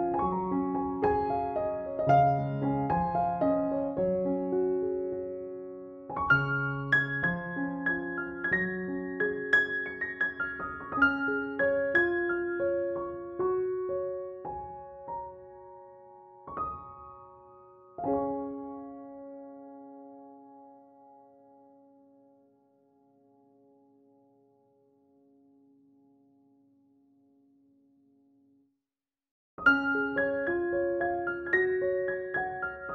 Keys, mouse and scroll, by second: 0.9-3.1 drag, 4.4 0, 4.6 ctrl+-, 8.7 scroll up 1, 9.0 ctrl+=, 9.5 click, 10.0 right click, 10.4 click, 10.8-11.4 ], 11.5 ], 11.9 click, 12.3 ctrl+z, 12.6-13.2 drag, 17.4 ], 17.5-18.4 click, 18.4 ], 18.6-19.1 drag, 20.2-22.7 typing, 20.3-21.1 click, 21.2 click, 21.7 click, 22.1-22.6 click, 22.8-23.9 click, 23.9-31.0 typing, 24.0-24.4 click, 24.7 click, 25.5-26.9 click, 26.3 click, 26.7 click, 26.9-27.4 click, 28.3-28.7 click, 29.2 click, 29.9-30.4 click, 30.4-32.1 click, 31.2-32.2 drag, 32.4-32.9 typing.